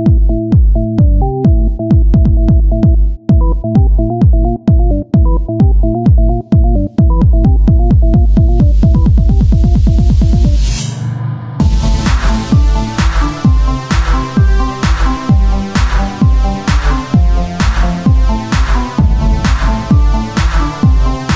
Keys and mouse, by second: 1.2 click, 2.3-5.7 drag, 5.1 Tab, 8.3 click, 9.0 KP_3, 9.3 z, 9.5 c, 11.6-13.1 drag, 12.6 ctrl+z, 13.2 c, 13.8-15.6 drag, 15.3 c, 16.2-17.3 drag, 16.6 z, 17.3 Tab, 21.2 c.